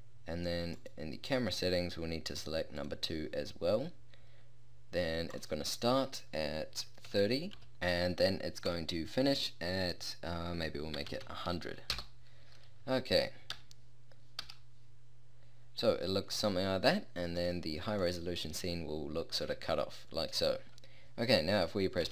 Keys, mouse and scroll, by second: 12.0 0, 13.6 KP_0, 14.4 KP_0, 22.0 p.